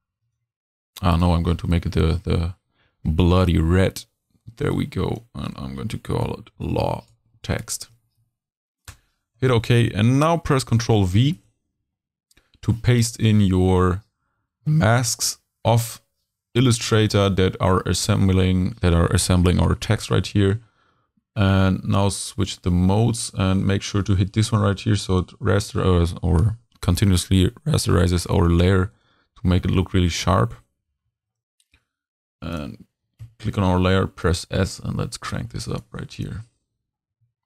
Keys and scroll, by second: 6.4-7.9 typing, 8.9 Return, 11.3 super+v, 33.2 s.